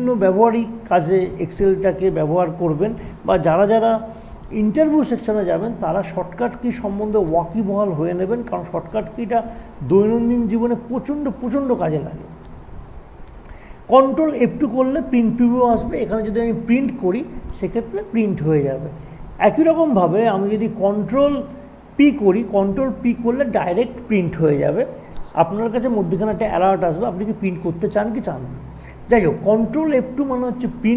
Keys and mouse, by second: 20.2 click, 20.2 typing, 30.1 click, 30.1 typing.